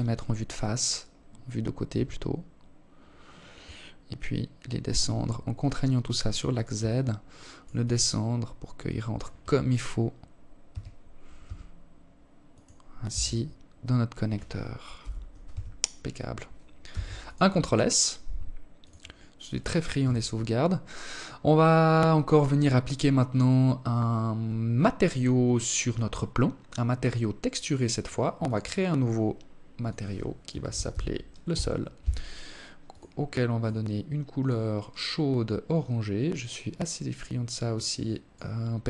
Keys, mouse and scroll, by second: 0.2 g, 5.2 alt+click, 6.1 alt+click, 9.0 g, 11.4 Tab, 11.9-12.3 scroll down 4, 13.3 KP_7, 13.8 KP_0, 15.2 ctrl+s, 18.3 t, 20.6 right click, 24.7-26.3 scroll up 1, 26.3 click, 27.0 click, 28.1 click, 31.1 click, 37.7 click, 38.7-38.8 scroll up 9.